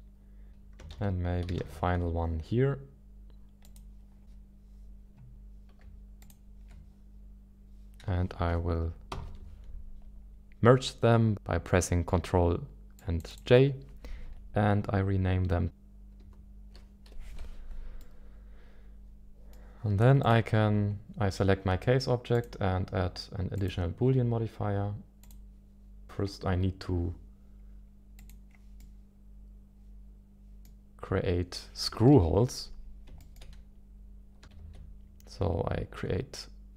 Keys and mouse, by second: 0.9 ctrl+d, 1.6 shift+d, 3.6 click, 4.2 g, 6.2 shift+click, 9.1 ctrl+j, 13.0 click, 13.3-17.7 drag, 18.0-19.6 middle drag, 25.2 click, 28.2 click, 28.8-30.6 middle drag, 31.8 KP_1, 32.1 KP_7, 33.2 shift+middle click, 34.6 shift+a.